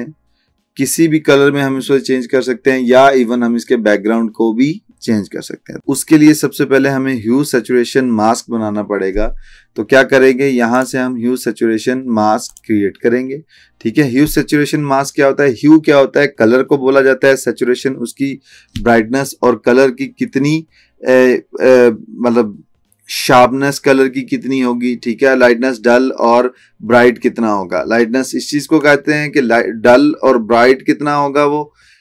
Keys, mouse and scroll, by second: 10.8 click.